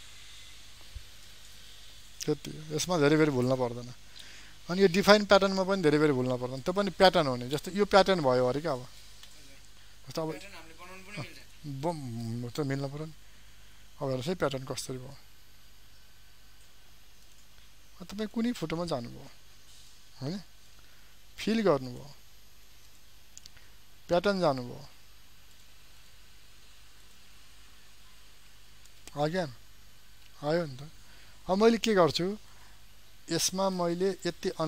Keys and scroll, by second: 30.5 ctrl+alt+z.